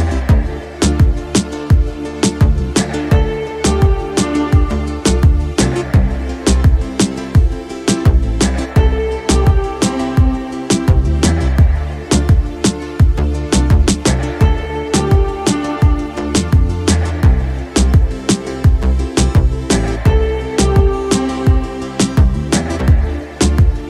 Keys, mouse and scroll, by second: 0.0 middle click, 0.8 shift+middle click, 1.1 middle click, 1.9 KP_5, 2.7 middle click, 3.7-6.6 middle drag, 7.1 shift+middle click, 7.7 z, 8.4 middle click, 8.9 shift+middle click, 10.8-12.0 middle drag, 12.5 shift+middle click, 13.6-23.0 middle drag, 23.4-23.8 middle drag.